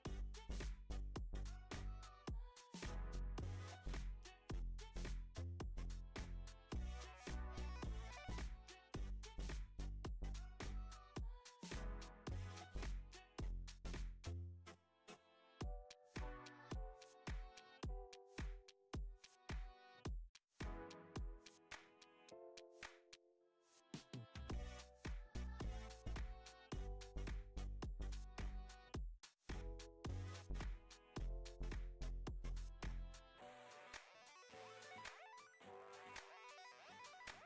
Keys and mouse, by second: 0.5 s, 2.8 s, 7.4 s, 10.0 g, 12.0 g, 15.1 g, 16.5 s, 18.3 s, 24.6 shift+d, 25.9 KP_3, 26.0 KP_3, 26.3 r, 29.2 middle click, 30.3 g, 31.7 KP_0, 34.9 g, 35.7 s, 37.3 g.